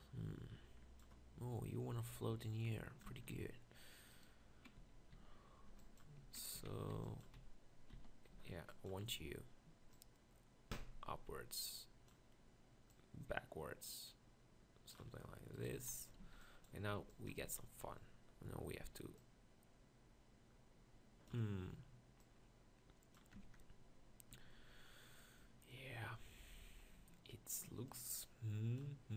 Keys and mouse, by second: 3.2 Tab, 3.3 z, 4.8-9.1 typing, 7.0 click, 15.7 z, 16.3 b, 17.0 b, 17.5 z, 23.4 Tab, 24.4 Tab.